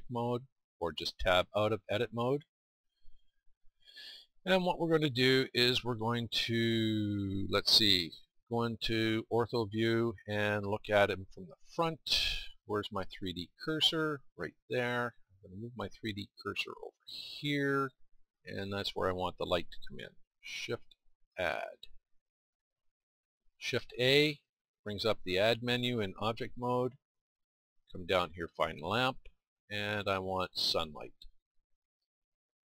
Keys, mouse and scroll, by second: 0.0-1.4 drag, 1.8 Tab, 2.3 Tab.